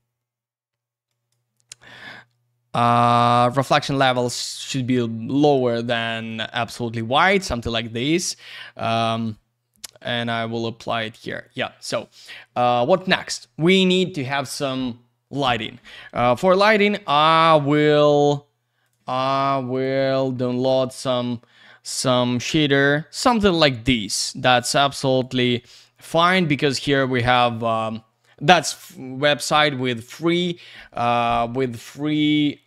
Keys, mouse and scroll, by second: 1.1 click, 6.2 click, 7.8 click, 9.1 click, 10.2 click, 11.2 click, 16.6 click, 19.8 click, 20.3-21.8 scroll up 1, 25.2 click.